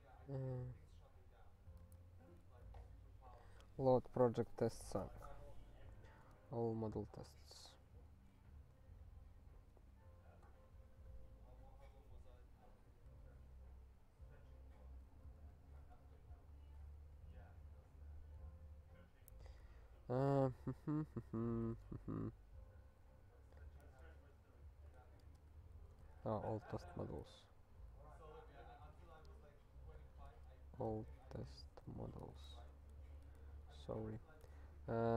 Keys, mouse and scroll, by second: 1.8 o, 2.6 i, 6.5 ctrl+n, 8.0 ctrl+a, 10.0 ctrl+s, 15.4 alt+f, 16.1 ctrl+b, 16.2 ctrl+b, 16.9 ctrl+alt+f, 20.4 ctrl+b, 22.5 ctrl+k, 23.0 alt+., 25.0 l, 26.0 ctrl+g, 26.8 alt+b, 27.2 alt+t, 28.0 alt+b, 30.0 l, 30.9 ctrl+g, 31.3 alt+b, 31.9 alt+f, 32.0 BackSpace, 32.4 ctrl+e, 32.7 ctrl+s, 33.2 s, 33.8 ctrl+g, 34.3 s.